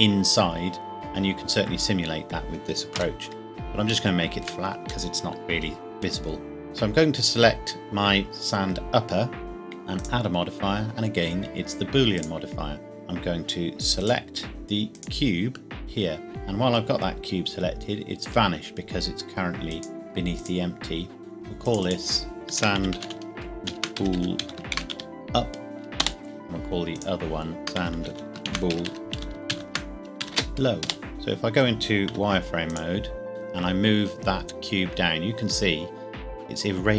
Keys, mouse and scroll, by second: 2.9 KP_1, 4.0 shift+middle click, 5.0 middle click, 6.6 click, 9.9 click, 14.0 click, 18.0 click, 19.6 click, 22.5-24.9 typing, 26.0 Return, 27.0 click, 27.6-30.4 typing, 30.9 Return, 31.1 Escape, 32.1 z, 32.7 click, 33.3 g, 33.3 z.